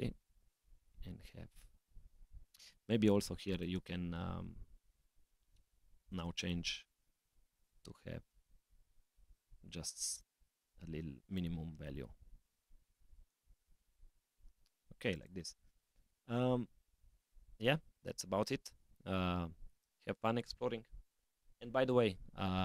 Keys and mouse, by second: 3.5 click, 6.0 click, 7.6-10.2 drag, 11.2 click, 12.3 g.